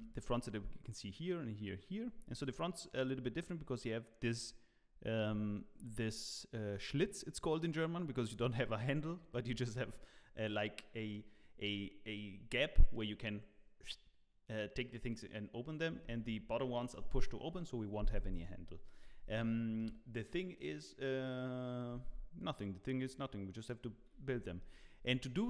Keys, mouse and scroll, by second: 2.1 scroll up 2, 18.5-19.2 scroll down 1, 19.3 shift+middle click, 21.9 Tab, 24.3 z, 24.7 Tab, 24.7 z, 24.8 middle click, 25.0 scroll down 4, 25.4 middle click.